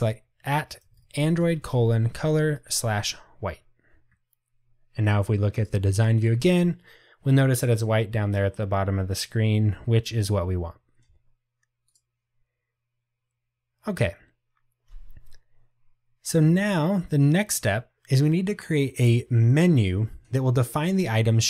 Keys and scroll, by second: 3.2 Return.